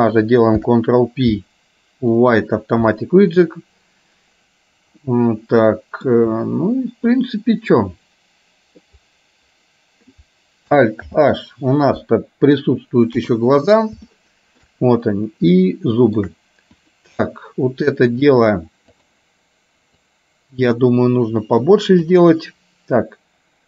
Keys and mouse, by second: 0.6 ctrl+p, 5.1-6.1 middle drag, 7.4-8.9 middle drag, 11.2 alt+h, 13.2 KP_3, 14.2 shift+middle click, 15.7 shift+middle click, 19.1 click, 20.3-22.2 drag.